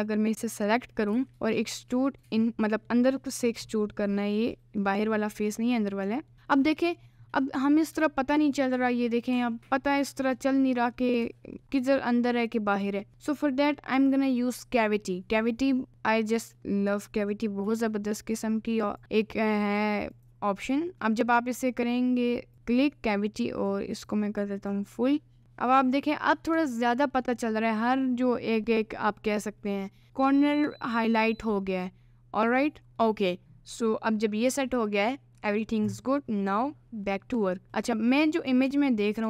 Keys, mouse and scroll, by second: 0.3-1.1 scroll up 1, 1.1 e, 2.4 middle click, 2.9 scroll up 1, 4.4 middle click, 6.1 middle click, 6.7-7.7 middle drag, 8.0 Tab, 8.9-10.2 middle drag, 11.3 Tab, 11.6 middle click, 12.5 middle click, 13.1 Tab, 14.0 n, 15.9 Tab, 16.4 right click, 17.6 n, 19.0-20.7 drag, 21.0 middle click, 22.5-25.3 drag, 25.4 Tab, 25.4 middle click, 26.4 middle click, 26.6 Tab, 26.9 middle click, 33.0 middle click, 37.9 middle click, 38.7 g.